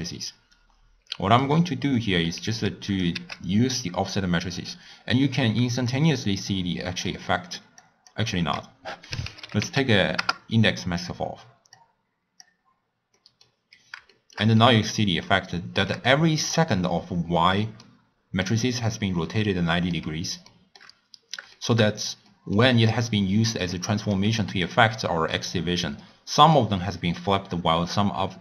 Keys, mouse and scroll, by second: 2.8 click, 3.3 shift+d, 5.8-7.3 drag, 7.3 middle click, 7.8 click, 8.4 ctrl+a, 11.7-13.2 drag, 13.2-16.4 middle drag, 16.4 click, 17.6 middle click, 18.0-18.4 scroll up 1, 18.4 click, 19.4-21.0 middle drag, 21.0-21.5 scroll down 2, 21.5-24.0 shift+middle drag, 24.0 click, 24.2 g, 26.4 click.